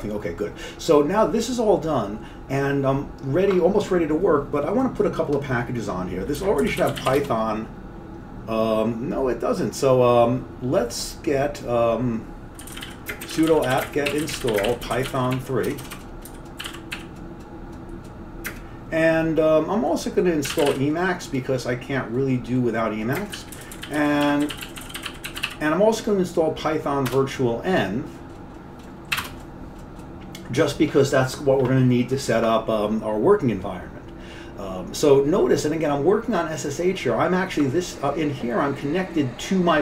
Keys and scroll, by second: 6.2-7.6 typing, 12.5-17.5 typing, 18.6 typing, 20.3-21.3 typing, 23.2-26.0 typing, 27.1 typing, 29.0-31.5 typing.